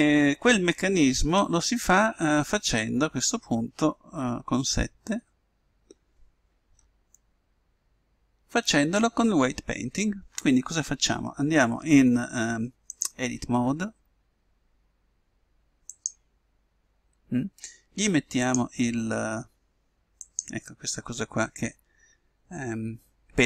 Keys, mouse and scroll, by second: 4.8 KP_7, 7.3 middle click, 18.5-20.2 drag.